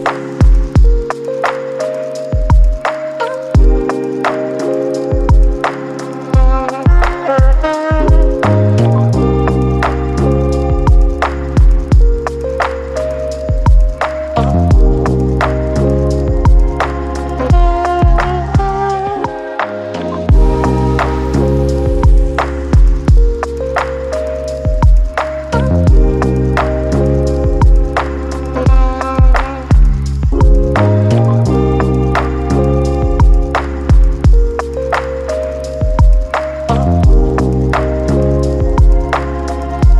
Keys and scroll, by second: 4.2 ctrl+z, 15.8-39.9 typing, 17.4 ctrl+d, 22.8 ctrl+z, 26.1 ctrl+d.